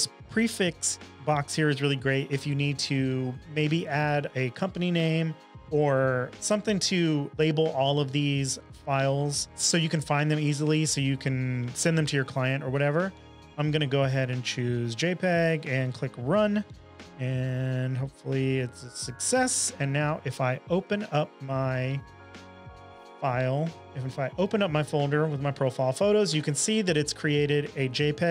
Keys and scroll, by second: 19.8 super+Tab, 20.8 super+Tab, 21.0 super+Tab, 27.1 space, 28.0 Right.